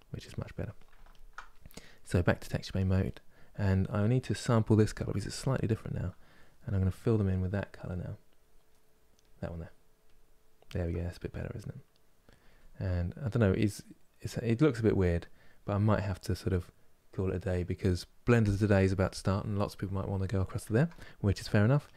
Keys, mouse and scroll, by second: 0.8 alt+click, 2.3 click, 2.7-6.4 middle drag, 6.4-10.3 drag, 10.5-15.7 middle drag, 20.3-21.5 ctrl+middle drag, 21.5-21.9 drag.